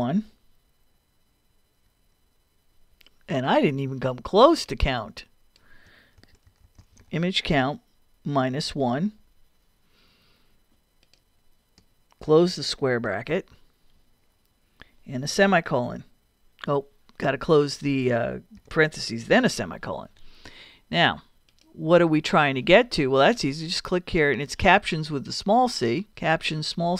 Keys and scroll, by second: 1.5 |, 6.0-7.1 typing, 13.3 shift+], 14.1 ], 18.6 shift+0, 19.3 shift+;, 19.9 ;, 26.1 s.